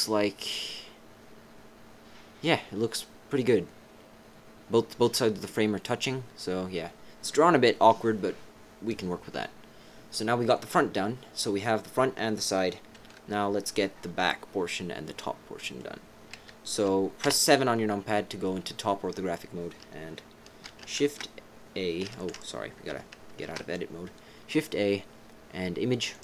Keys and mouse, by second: 10.7 middle click, 12.9 KP_3, 17.2 KP_7, 20.9 shift+a, 22.2 click, 22.9 Tab, 23.4 shift+a.